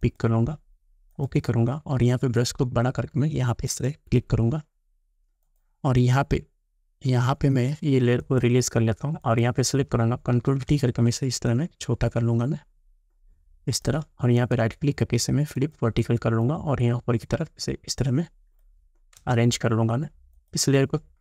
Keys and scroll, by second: 10.4 ctrl+t, 19.2 Return.